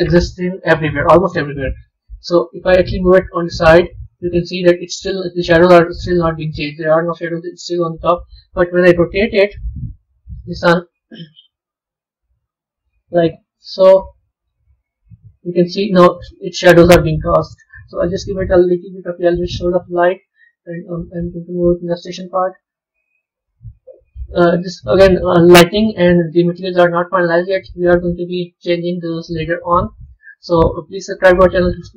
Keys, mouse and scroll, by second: 3.3 g, 4.3-5.9 middle drag, 5.9-6.9 scroll up 3, 6.9-9.0 middle drag, 9.0 KP_7, 11.7 KP_1, 13.2 r, 15.4-17.5 middle drag, 17.5 click, 19.9-20.3 scroll down 2, 20.8 click, 23.3 scroll down 2, 23.8-31.9 middle drag.